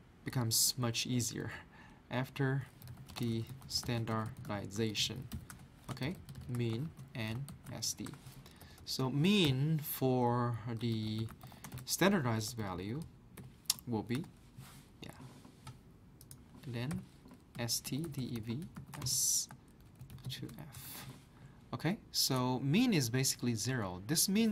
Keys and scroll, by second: 2.6-8.6 typing, 5.5 Return, 10.6-14.7 typing, 16.7-21.5 typing.